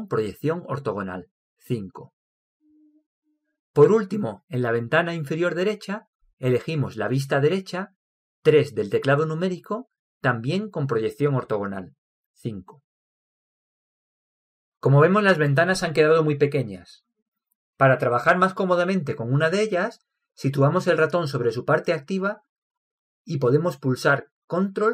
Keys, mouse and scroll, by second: 2.3 KP_5, 9.2 KP_3.